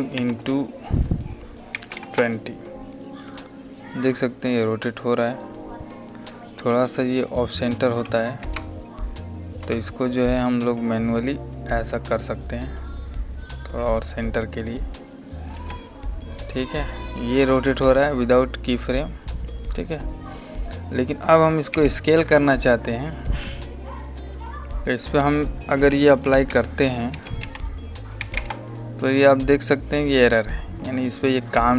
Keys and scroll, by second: 1.6 KP_2, 2.0 KP_0, 7.8 alt+y, 15.4 space, 21.6 alt+s, 25.5-27.0 typing, 28.1 KP_2, 28.2 KP_0.